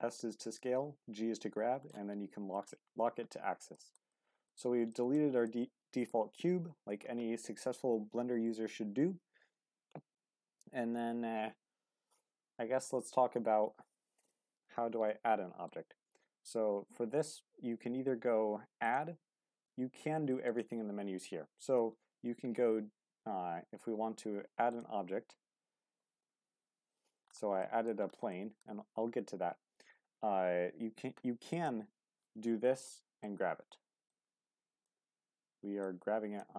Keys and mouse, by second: 0.1 shift+middle drag, 1.9-2.5 middle drag, 3.7 shift+middle drag, 4.1-4.5 middle drag, 4.9 shift+middle drag, 5.4-6.1 middle drag, 15.1-15.6 middle drag, 18.8-21.7 drag, 21.7 t, 31.5 click, 34.1 click, 35.8 click.